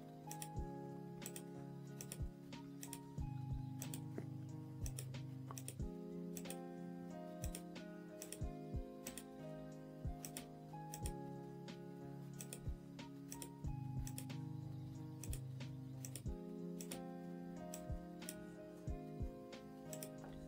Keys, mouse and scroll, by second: 1.5 click, 2.2-6.7 drag, 7.6-9.3 drag, 10.7-12.7 drag, 13.5-20.4 drag.